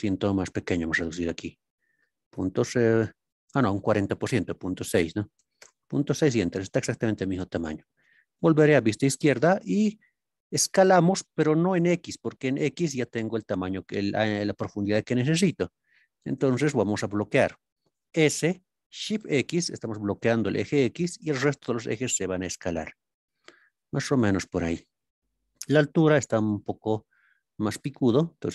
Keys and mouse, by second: 5.5 KP_Enter, 8.6 ctrl+KP_3, 10.8 s, 12.3-12.8 middle drag, 16.4 ctrl+KP_3, 18.1 s, 19.1 shift+x, 24.1 click.